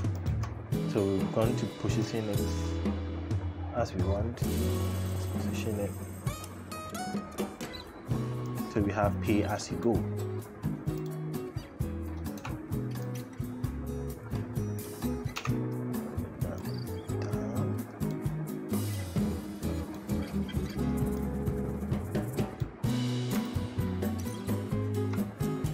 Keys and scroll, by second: 12.2 t, 15.2 e.